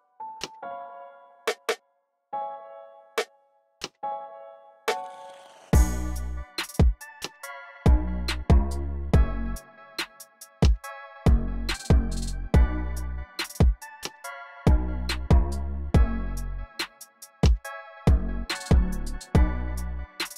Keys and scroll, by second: 0.6 x, 11.1 super+w, 11.6 super+w.